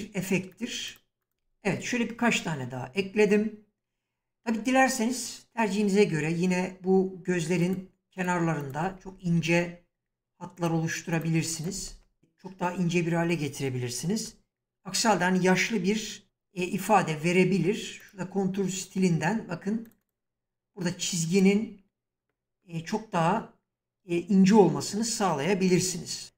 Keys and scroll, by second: 11.9 Return, 16.2 shift+f, 25.6 s.